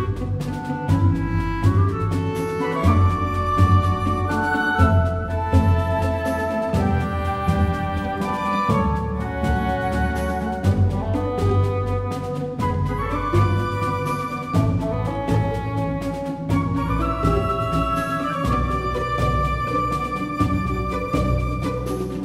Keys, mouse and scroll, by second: 1.1 click, 1.4-3.5 middle drag, 3.5 KP_3, 4.0 KP_1, 5.2 Tab, 7.5 click, 7.6 r, 10.9 r, 14.4-22.0 drag, 16.9 r, 20.7 a, 21.0 a, 22.0 r.